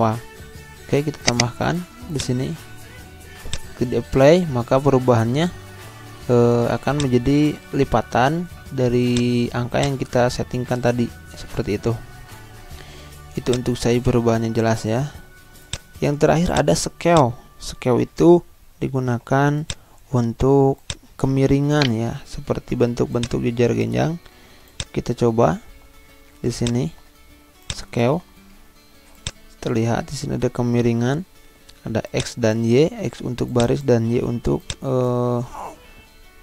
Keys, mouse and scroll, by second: 1.3 click, 4.6-5.0 scroll down 1, 6.9-9.0 drag, 11.1 ctrl+z, 13.0 z, 13.4-15.7 drag, 18.4 Home, 18.8 Delete, 19.6 click, 21.7 shift+right click, 22.7 z, 23.2-29.2 drag, 32.1-36.4 drag.